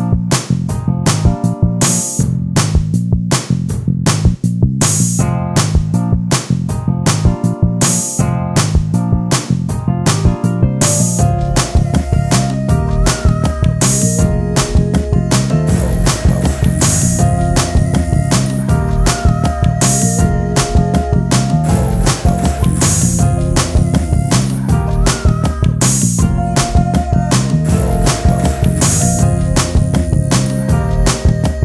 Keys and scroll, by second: 1.0 f, 19.9 h, 20.8 h.